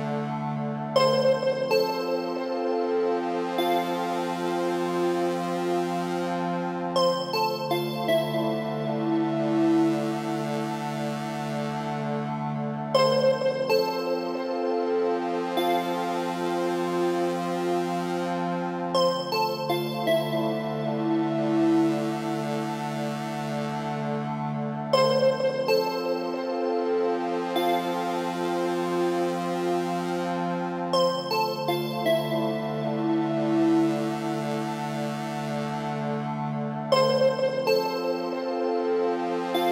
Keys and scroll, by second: 0.0 Return, 11.3 ctrl+g, 30.7 alt+space.